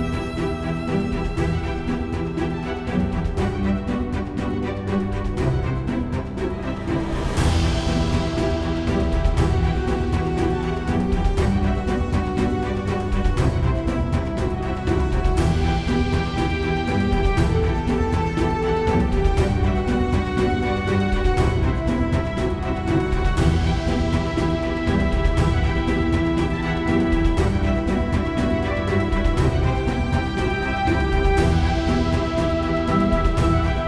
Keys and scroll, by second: 12.3 F9, 14.1-15.7 typing, 20.8 scroll.